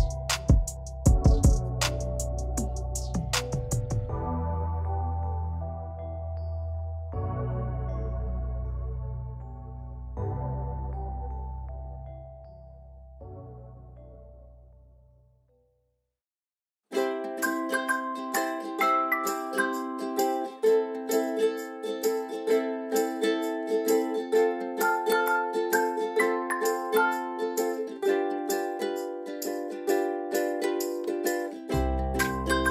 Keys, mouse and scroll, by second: 0.7 i, 0.9 click, 5.4 v, 5.8 click, 8.4 click, 13.5 click, 15.1 i, 15.4 click, 16.2 v, 16.4 click, 21.4 v, 21.6 click, 25.6 click, 31.2 i, 31.4 click.